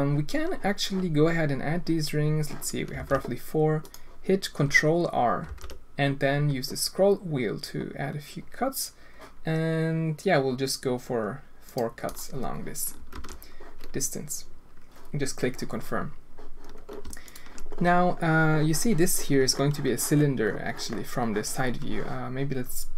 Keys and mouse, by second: 3.0 ctrl+r, 5.4 ctrl+r, 13.1 alt+a, 19.1 middle click, 20.9-22.7 middle drag.